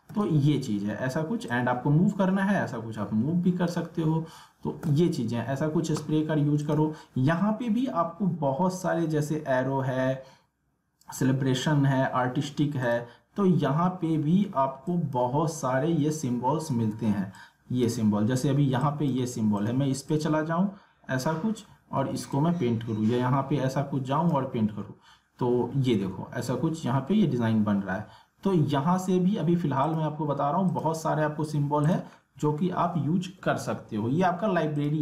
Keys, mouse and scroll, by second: 0.2 ctrl+z, 1.5-4.8 drag, 4.8 ctrl+z, 6.6 click, 12.8 click, 16.7 ctrl+z, 17.3-19.1 drag, 20.3-21.9 drag, 21.9 ctrl+z, 22.3-24.7 drag, 24.7 alt+scroll up 1, 27.3-28.3 alt+scroll down 1, 29.9 click, 32.2 alt+scroll down 1, 32.6 alt+scroll up 1, 34.7 click.